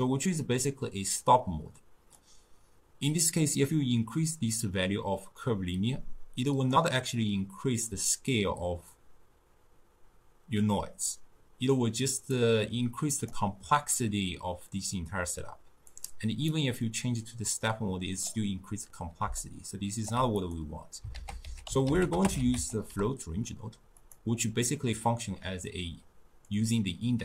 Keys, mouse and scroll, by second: 0.0-2.3 middle drag, 2.3-5.3 drag, 12.4-15.4 drag, 16.0 click, 16.5-19.3 drag, 19.3 d, 19.4 right click, 20.1 d, 20.4 click, 21.2 ctrl+a, 26.5-27.2 drag.